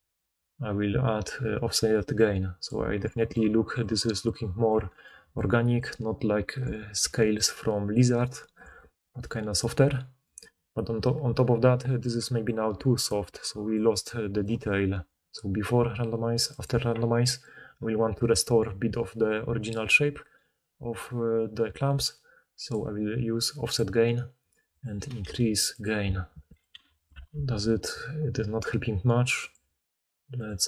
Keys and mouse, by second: 0.0-3.4 middle drag, 3.4-8.5 typing, 11.8-17.2 drag, 11.8-17.2 middle drag, 11.8-17.5 right drag, 12.0-14.5 typing, 17.5-22.7 drag, 25.8 click, 27.1-29.4 drag.